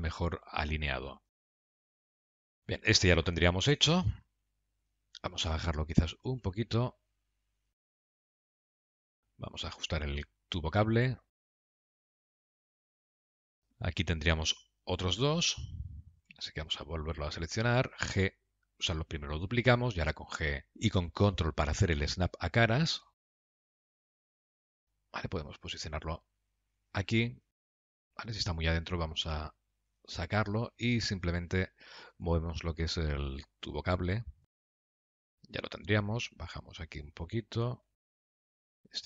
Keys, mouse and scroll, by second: 1.5 middle click, 1.8 g, 3.1 scroll down 2, 3.5 middle click, 4.9 scroll down 2, 5.3 middle click, 6.5 g, 8.4 KP_Decimal, 8.6 scroll down 2, 8.7 middle click, 9.9 click, 10.3 Tab, 11.4 click, 11.6 g, 13.0-13.4 scroll down 11, 13.4 shift+middle click, 16.7 Tab, 16.9 click, 17.9 shift+d, 23.3 KP_Decimal, 23.7-24.2 scroll down 6, 23.9 middle click, 24.4 g, 27.7 middle click, 29.3 g, 30.8 click, 31.5 Tab, 32.5 click, 32.7 g, 34.6 click, 34.7 g, 35.4 middle click, 37.2 Tab, 37.4 click, 37.9 g, 38.6 middle click.